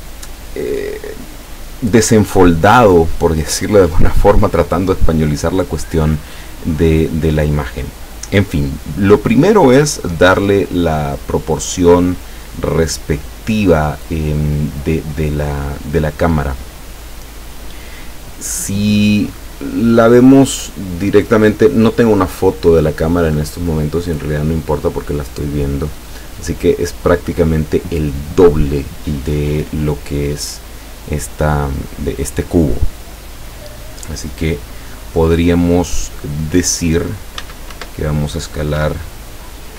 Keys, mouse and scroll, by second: 37.4 s, 37.8 1, 38.9 Escape, 39.6-39.7 typing.